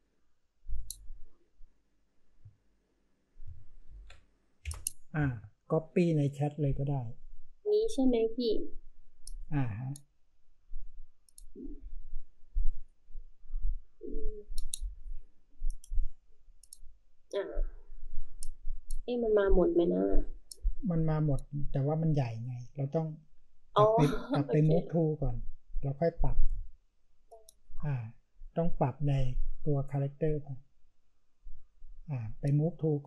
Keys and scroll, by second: 3.8 ctrl+v, 4.6 Return.